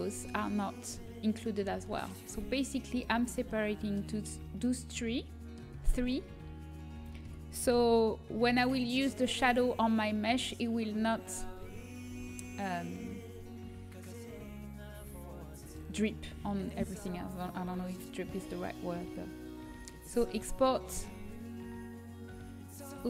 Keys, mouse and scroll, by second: 0.2 middle click, 7.4 g, 11.2 middle click, 12.0 Tab, 17.4-19.8 drag, 22.5 click.